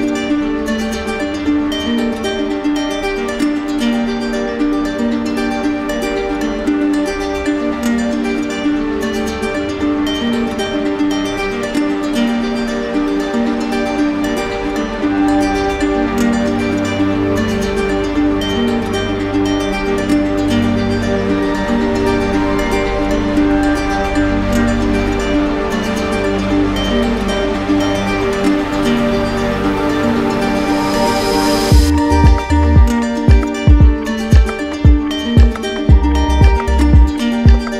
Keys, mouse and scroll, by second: 1.5-2.5 drag, 3.7-4.7 drag, 4.7 alt+right click, 5.9 alt+right click, 6.1 alt+right click, 8.4 right click, 9.4 alt+right click, 10.6 alt+right click, 11.9 right click, 15.3 click, 18.0 click, 19.7 right click, 22.7 click, 23.7 click, 27.0 click, 28.1 right click, 29.1 alt+right click, 29.9 right click, 30.6 right click, 31.6 right click, 33.1-34.2 drag, 35.4-36.5 drag, 37.5-37.7 drag.